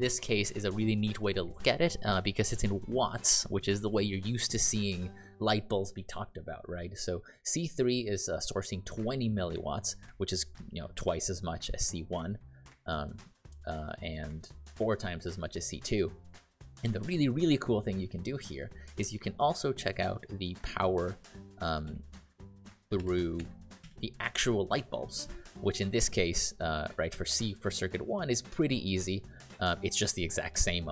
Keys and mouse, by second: 21.8 shift+p, 22.9 (.